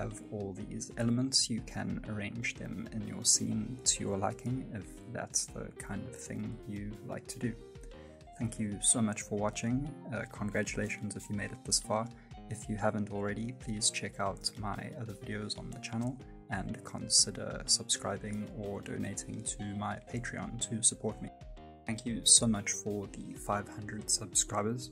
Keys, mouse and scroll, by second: 0.2 middle click, 0.9 right click, 0.9 middle click, 1.2 g, 1.7 middle click, 2.1 g, 2.3 middle click, 2.5 g, 2.8 middle click, 3.2 middle click, 3.7 g, 4.0 middle click, 4.2 right click, 4.5 g, 4.6 g, 4.8 shift+middle click, 5.0 middle click, 5.3 middle click, 5.4 shift+middle click, 5.6 middle click, 5.7 shift+middle click, 5.7 right click, 5.8 middle click, 6.7 g, 7.2 scroll up 1, 7.3 middle click, 7.8 middle click, 8.0 g, 8.7 g, 8.8 right click, 8.9 middle click, 9.3 shift+middle click.